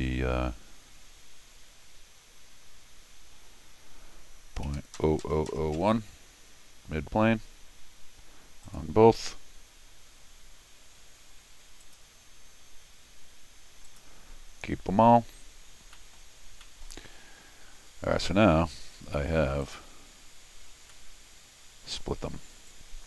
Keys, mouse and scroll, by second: 8.6 click, 11.8 click, 13.8 click, 15.9 middle click, 16.4-16.8 scroll down 2, 16.6 middle click, 17.1 middle click, 19.6 click, 20.9-22.0 middle drag, 22.7 click.